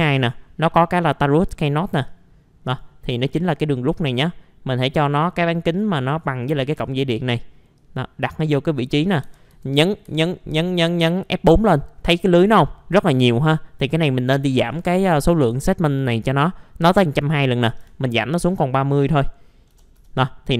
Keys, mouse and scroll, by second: 1.1-2.1 scroll up 1, 2.1 click, 6.4 right click, 6.8 alt+middle click, 7.1 scroll down 1, 7.8-9.2 drag, 9.2 typing, 10.0 F4, 10.4 middle click, 10.7-11.2 scroll down 1, 11.2 middle click, 12.3 click, 17.8 KP_3, 19.7 KP_0.